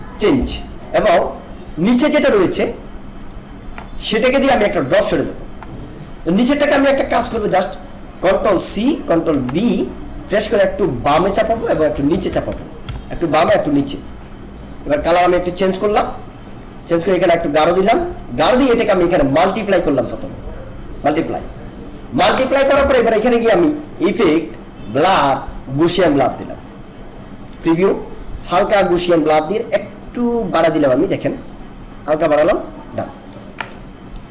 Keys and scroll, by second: 7.3 ctrl+=, 8.6 ctrl+c, 10.7 Left, 11.7 Down, 12.8 Left, 13.4 Down.